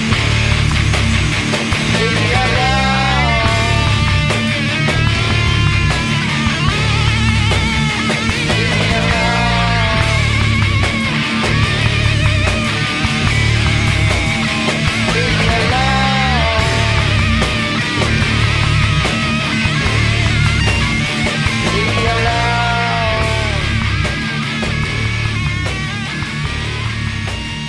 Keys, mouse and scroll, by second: 0.9 Tab, 1.6 middle click, 2.0 right click, 4.4-6.6 right drag, 6.6 e, 8.8-10.6 drag, 9.7 e, 11.0 e, 11.2-12.9 drag, 11.6 e, 13.7-15.6 drag, 15.6 ctrl+f, 16.8 Escape, 18.6-22.2 middle drag, 22.2 right click, 22.4 middle click, 22.9-24.7 drag.